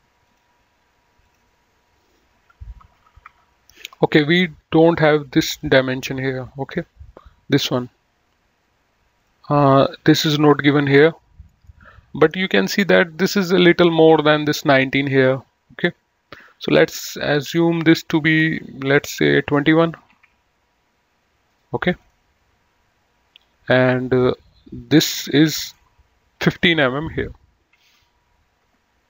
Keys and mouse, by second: 0.4 click, 3.1 KP_1, 3.5 Return, 5.7 click, 9.4 click, 17.7 click, 20.3 KP_2, 20.4 KP_1, 20.5 Return, 22.1 click, 24.3 click, 25.7 right click, 26.7 click, 28.4 KP_1, 28.6 KP_5, 28.8 Return.